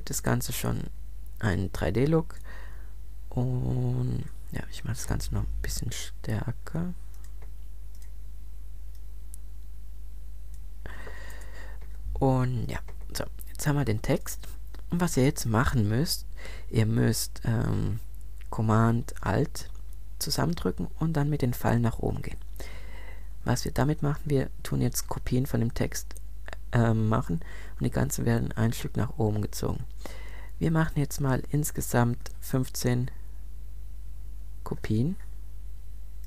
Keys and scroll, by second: 5.2 super+t, 11.3 Return, 22.4 alt+super+Up, 32.0 super+Up.